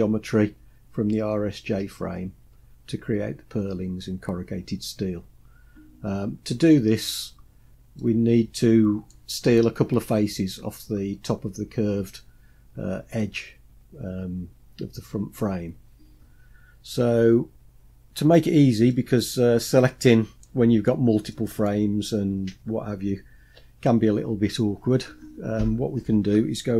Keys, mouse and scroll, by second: 7.3-8.0 scroll down 2, 8.0-9.1 middle drag, 18.9-20.4 middle drag, 21.3-21.7 middle drag.